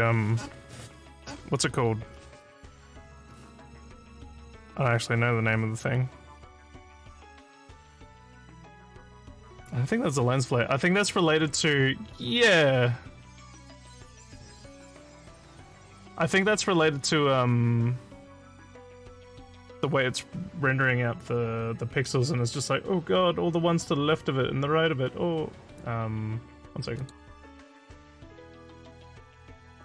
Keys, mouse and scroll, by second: 27.0 click.